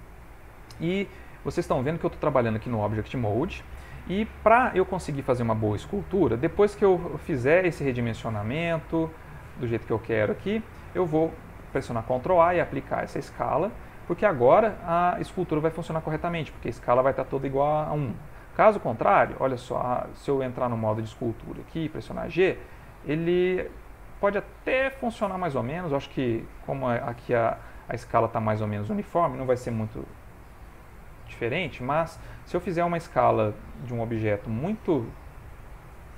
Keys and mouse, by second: 2.4 ctrl+middle click, 5.4 middle click, 6.5 middle click, 7.3 s, 8.3 g, 9.1 s, 10.9 middle click, 11.7 ctrl+a, 18.0 ctrl+z, 20.7 ctrl+Tab, 22.5 click, 23.7 click, 24.8 click, 28.4 click, 29.8 ctrl+z, 30.6 ctrl+z, 31.5 ctrl+middle click, 32.6 Tab, 34.2 Tab, 35.9 ctrl+Tab.